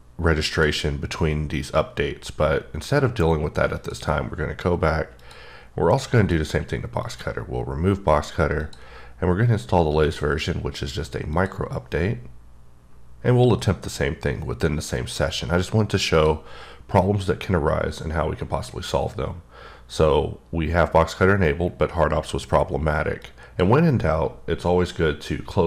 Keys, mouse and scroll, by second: 0.5 click, 3.7 click, 5.2 click, 6.2 click, 7.0 click, 8.6 click, 10.0 click, 11.3 click, 16.1 click, 23.2 click.